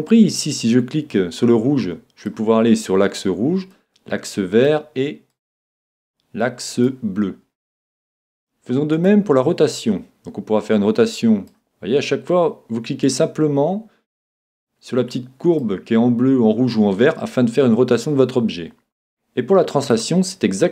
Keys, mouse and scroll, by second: 0.6 click, 3.7-7.0 drag, 8.9-14.0 drag, 14.2 click, 19.9 click.